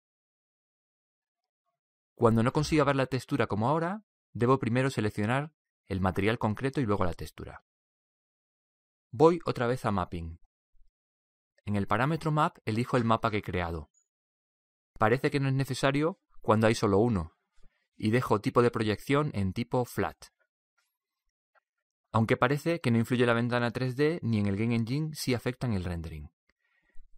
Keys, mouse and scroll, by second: 0.0-1.7 right drag, 6.3-9.2 drag, 13.6-15.9 drag, 15.9-21.4 middle drag, 21.7-27.0 middle drag, 27.0-27.1 drag.